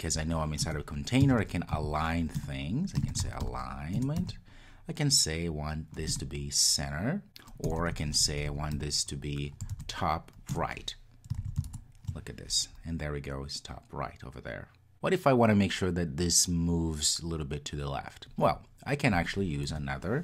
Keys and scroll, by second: 2.4 Return, 10.5 Return, 11.5 super+s.